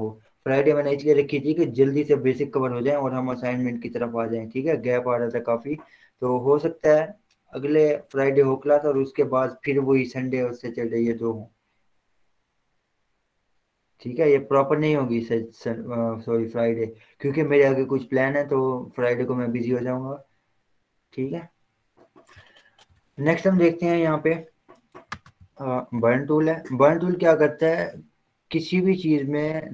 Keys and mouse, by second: 23.5 click, 25.1 right click, 26.1 click, 27.9 z.